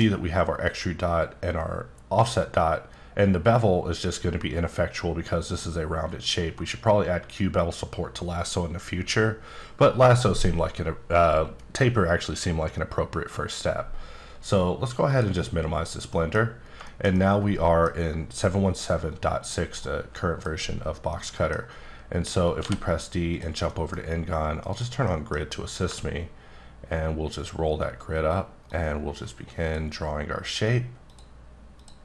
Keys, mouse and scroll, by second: 15.1 click, 16.1 middle click, 16.4-16.8 scroll up 4, 16.8 shift+middle click, 17.4 middle click, 19.8 middle click, 20.7-21.1 scroll down 2, 21.1 middle click, 21.7-22.6 scroll up 1, 22.6 d, 23.3 click, 23.7 middle click, 24.0-24.7 scroll up 2, 24.7 click, 25.0 middle click, 25.5-26.5 scroll up 2, 26.5-27.8 ctrl+scroll up 5, 27.8 scroll up 2, 28.0-28.7 ctrl+scroll down 1, 28.7 ctrl+click, 31.1 ctrl+click.